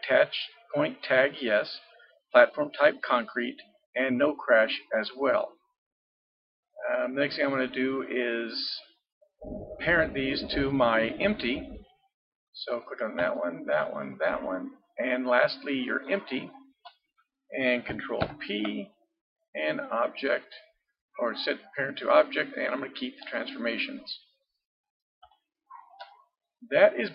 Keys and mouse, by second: 5.5-12.7 middle drag, 12.7-15.7 drag, 15.9-18.2 drag, 18.2 ctrl+p, 24.8-26.5 middle drag.